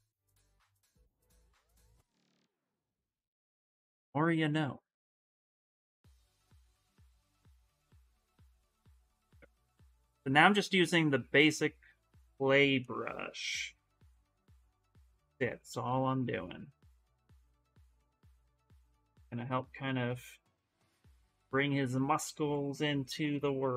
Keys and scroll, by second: 6.0 s, 17.4 s, 18.4 s.